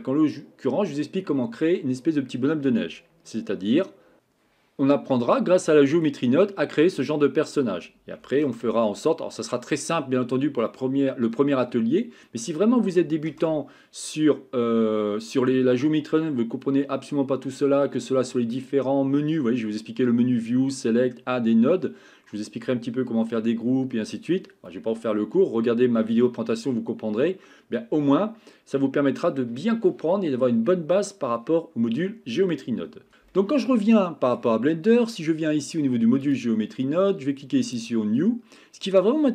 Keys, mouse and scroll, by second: 33.3-34.4 middle drag, 34.7 shift+middle drag.